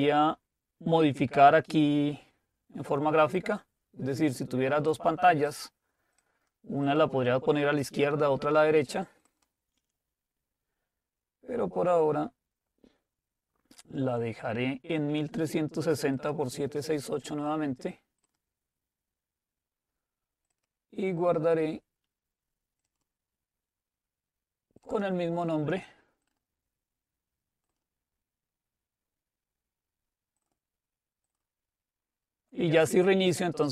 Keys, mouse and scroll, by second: 3.3-4.4 drag, 5.5 click, 9.3 click, 16.2 click, 18.4 click, 20.5 click, 22.9 click, 24.9-27.1 drag, 27.7 click, 30.4 click.